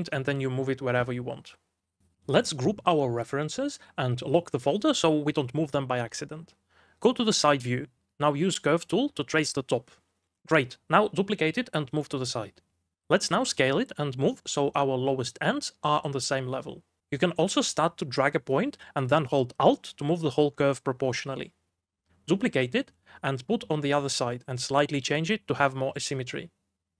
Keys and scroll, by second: 1.9-3.2 typing, 4.5 ctrl+g, 12.0 1, 12.6 2, 13.6 shift+d, 14.8 s, 15.4 s, 17.0 g, 18.2 v, 18.5 w, 19.9 1, 26.2-26.9 typing.